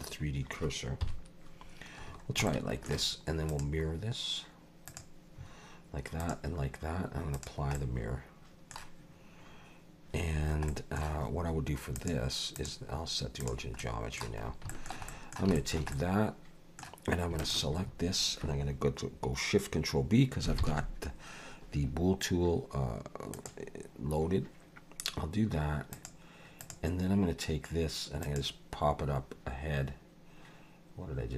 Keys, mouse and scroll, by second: 1.0 KP_7, 2.0-2.3 scroll down 3, 2.5 shift+middle click, 3.5 click, 6.2 click, 7.3 click, 7.8 middle click, 10.3-10.7 scroll down 2, 10.7 middle click, 11.9 click, 13.8 middle click, 14.4 scroll up 2, 14.7 shift+middle click, 15.1 middle click, 15.5 shift+middle click, 15.9 middle click, 17.4 shift+click, 20.6 ctrl+shift+b, 25.9 click, 26.6 click, 28.2 click.